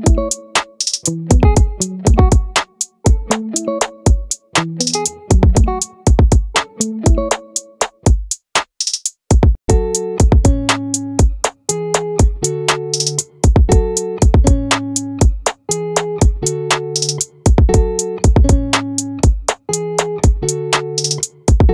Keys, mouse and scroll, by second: 0.8-2.6 middle drag, 4.3 ctrl+z, 7.2 z, 10.9 middle click, 13.1-15.1 middle drag, 19.3-21.7 right drag.